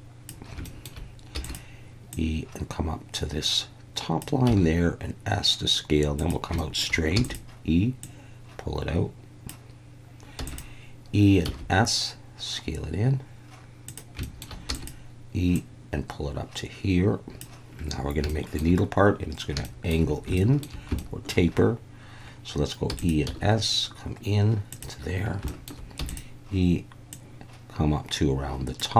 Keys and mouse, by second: 0.7 shift+middle click, 1.4 e, 2.1 click, 6.2 click, 6.2 s, 6.7 shift+middle click, 7.1 e, 7.2 click, 8.1 click, 10.4 e, 10.5 click, 11.4 s, 13.9 click, 14.3 shift+middle click, 14.7 e, 14.7 click, 15.6 click, 18.4 shift+middle click, 19.7 shift+middle click, 20.4 shift+middle click, 21.1 shift+middle click, 22.9 e, 23.0 click, 23.3 s, 24.7 click, 25.6 shift+middle click, 26.0 e, 26.1 click, 27.1 click.